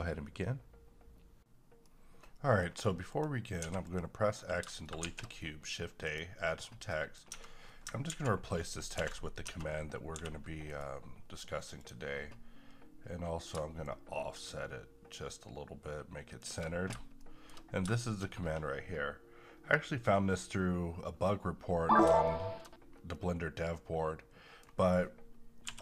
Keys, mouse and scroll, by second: 3.1 click, 3.6 x, 3.8 click, 5.0 shift+a, 6.0 click, 6.9 middle click, 7.3 Tab, 8.1 ctrl+a, 9.0 ctrl+v, 9.4 Tab, 10.1 g, 10.7 right click, 11.8-17.2 drag, 17.2-22.2 shift+middle drag, 22.2 shift+middle click, 22.8 scroll down 1, 23.1-25.6 middle drag, 25.6 n.